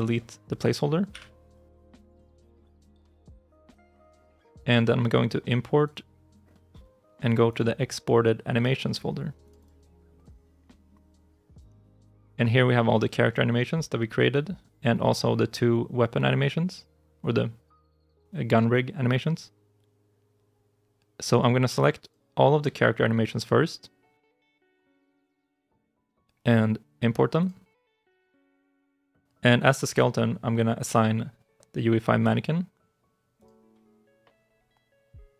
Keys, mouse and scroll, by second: 1.0 Delete, 3.6 right click, 9.4 double click, 24.0 shift+click.